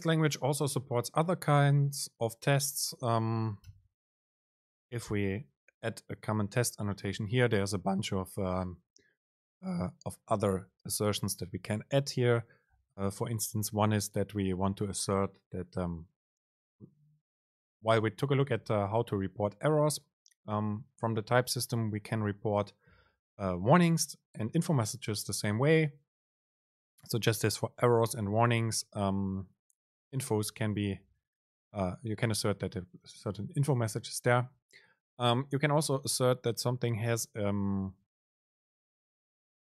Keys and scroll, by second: 6.9 super+space.